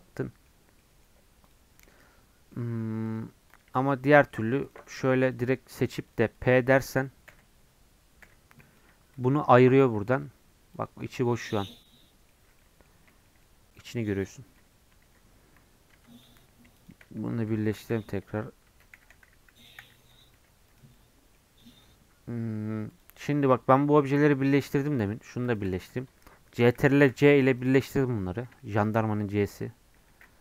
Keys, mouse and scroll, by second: 0.6 scroll down 4, 0.8 middle click, 1.4 click, 1.8-2.3 scroll up 2, 1.9 middle click, 2.5 middle click, 3.1 click, 3.7 Tab, 4.1 middle click, 4.4 3, 4.7-7.3 drag, 7.3 o, 8.2 p, 8.9 Tab, 9.1 click, 9.7 g, 11.0-12.3 middle drag, 12.3 scroll up 1, 12.6 middle click, 12.9 scroll up 1, 13.1-14.7 shift+middle drag, 14.7 scroll down 2, 15.0 ctrl+z, 15.9 Tab, 16.2 Tab, 16.8-17.8 shift+drag, 17.8 ctrl+j, 18.7 Tab, 19.0 a, 20.4 Tab, 20.7 click, 20.9 middle click, 21.6 click, 21.8-22.9 middle drag, 22.9 click, 23.3 middle click, 23.7 g, 24.9-26.9 drag, 26.9 ctrl+j, 27.5-28.6 drag, 28.6-30.1 shift+middle drag, 30.1 ctrl+j.